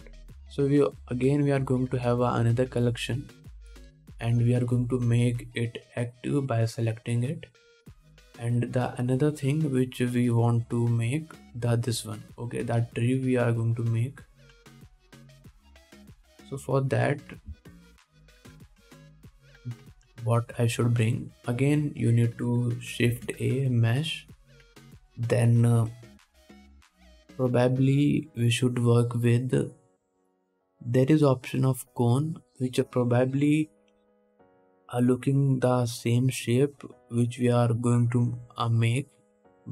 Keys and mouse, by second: 2.0-3.6 drag, 3.6-4.8 middle drag, 4.8-8.8 drag, 8.8-18.2 middle drag, 9.0-18.2 drag, 9.0-18.2 right drag, 19.5 ctrl+s, 21.3 shift+a, 27.4-38.3 middle drag.